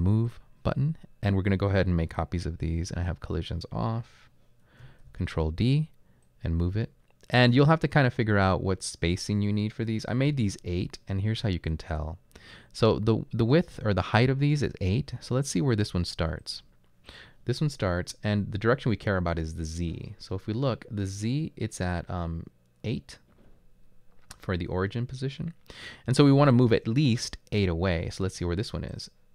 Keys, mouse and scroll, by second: 4.8 ctrl+d, 10.3-11.1 typing.